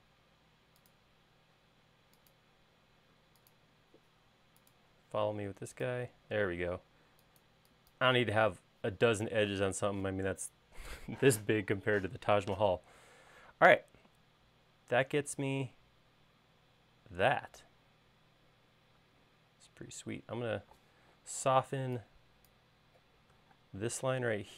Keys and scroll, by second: 7.2 space, 7.6 e, 14.1 space, 20.7 e, 24.4 space.